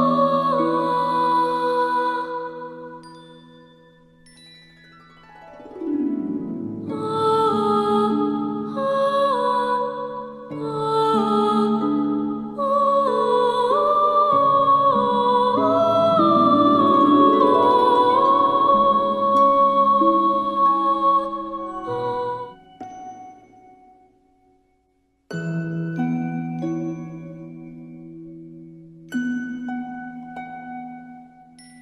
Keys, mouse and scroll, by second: 22.9 space, 23.1 click, 24.3 alt+scroll up 1, 24.7 space, 24.8-25.4 click, 25.1 space, 25.6-26.0 drag, 30.7 click.